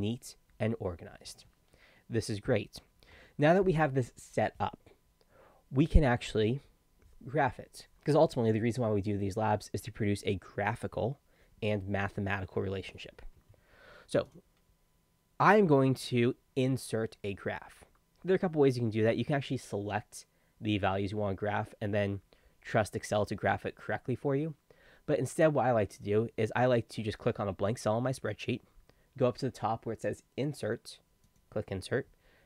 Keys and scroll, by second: 3.2 Escape.